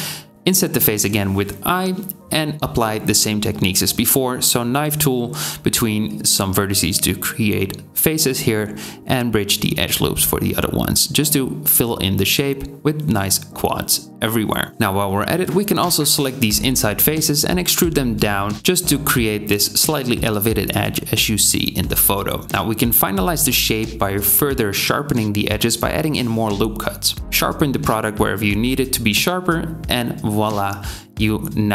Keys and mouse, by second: 0.0 KP_7, 0.1 i, 1.3-9.3 right drag, 2.2 k, 4.1 k, 5.8 2, 7.8 3, 7.8 click, 7.8 middle click, 8.0 click, 8.0 middle click, 8.1 x, 8.6 2, 9.5 shift+click, 11.0 click, 11.6 k, 13.1 a, 13.4 a, 13.6 Tab, 14.4 Tab, 14.7 click, 14.7-17.3 middle drag, 14.7 c, 17.3 ctrl+z, 17.3 click, 17.7 e, 20.0 i, 21.6 Tab, 22.4 ctrl+middle click, 22.7 ctrl+r, 23.1-26.0 drag, 27.0 Tab.